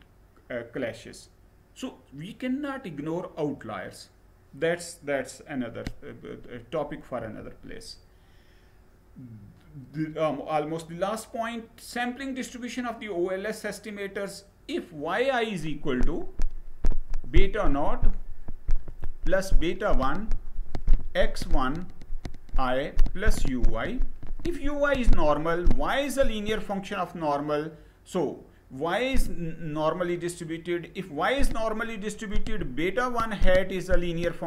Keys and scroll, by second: 6.9 Right.